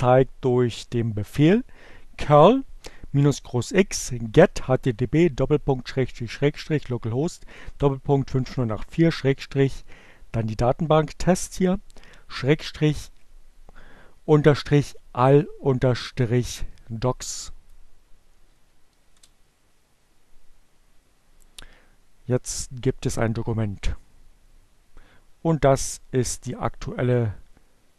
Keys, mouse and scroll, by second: 14.1 Up, 15.7 Return, 24.9-27.3 drag.